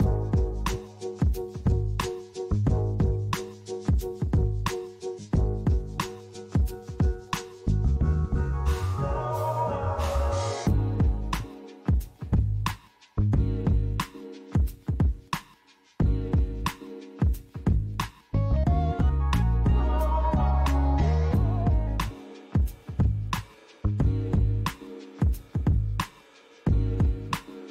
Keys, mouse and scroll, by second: 2.4 m, 11.2 click, 12.1 click, 12.9 click, 14.7 click, 19.5 right click, 21.2 click, 21.5 right click, 22.7 click, 23.1 right click, 24.3 click, 25.5 click, 26.2 click.